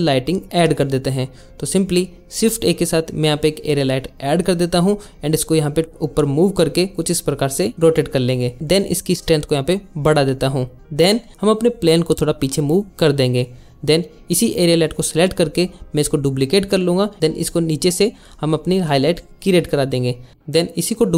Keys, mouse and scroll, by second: 0.1 click, 1.0 click, 1.4 click, 1.9 alt+shift+z, 2.2 shift+a, 4.1 z, 4.5 click, 5.2 alt+r, 6.9 r, 8.2 click, 8.5 g, 10.1 click, 10.4 shift+Left, 11.3 click, 11.5 click, 12.0 y, 12.8 click, 13.7 click, 14.8 shift+d, 15.5 click, 15.8 r, 16.3 click, 16.3 g, 16.4 click, 16.5 click, 16.6 click, 17.1 click, 18.6 ctrl+z, 19.4 shift+d, 20.3 click, 20.8 r.